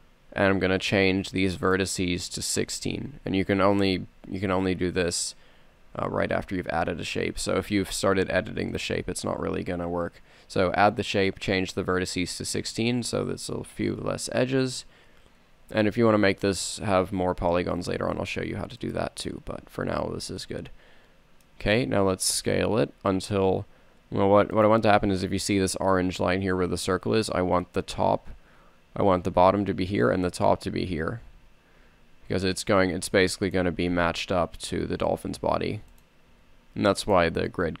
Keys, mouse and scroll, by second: 0.5 t, 12.9 t, 15.9 r, 20.6-21.3 middle drag, 22.7 s, 31.9 s, 33.9 g, 36.5 s.